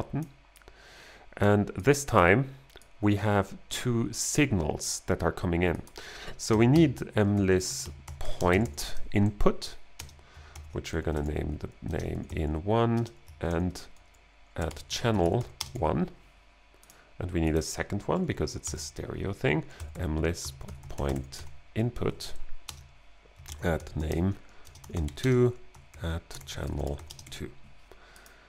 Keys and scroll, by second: 6.4-13.0 typing, 9.1 Right, 10.5 alt+g, 13.5 alt+g, 14.4-15.7 typing, 18.7-27.7 typing, 22.3 Right, 23.5 alt+g, 25.9 alt+g.